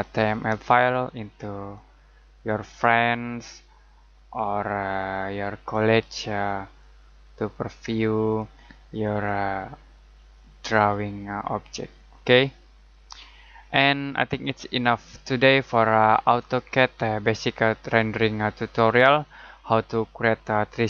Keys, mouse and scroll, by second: 19.2 click.